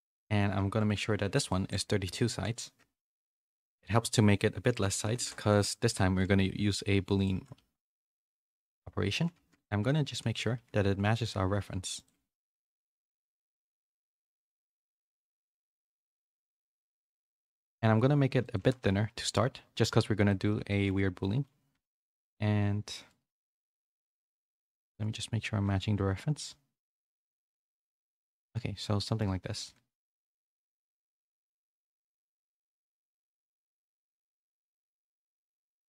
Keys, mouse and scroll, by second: 0.0 middle click, 0.4 r, 1.3-2.5 drag, 6.1 s, 7.3 g, 9.3 KP_1, 9.9 z, 10.5 s, 12.1 z, 12.6 z, 13.0 middle click, 13.6 s, 14.8 s, 16.2 g, 17.8 s, 18.5 g, 20.2 middle click, 20.6 shift+middle click, 21.2 middle click, 23.1-25.6 typing, 23.9 Tab, 28.2 z, 28.4 middle click, 29.5 s, 31.3-33.0 middle drag, 33.6 Tab, 34.1 middle click.